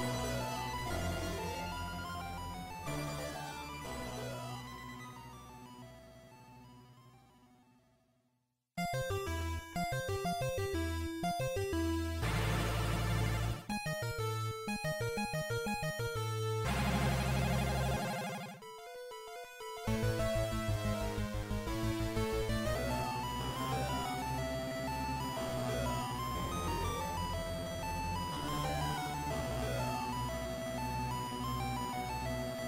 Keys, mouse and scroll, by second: 1.6 click, 6.5-8.3 scroll up 5, 9.4 g, 17.7 click, 18.6 g, 19.8 right click, 20.4 click, 21.7 click, 22.7-23.4 scroll down 2, 22.7 KP_1, 23.4-24.0 scroll down 2, 25.0 shift+middle click, 25.0-25.4 scroll down 2, 28.6-29.1 scroll up 3, 29.4-29.8 scroll up 1, 30.0-30.4 scroll up 1, 30.4 shift+middle click, 32.2 g.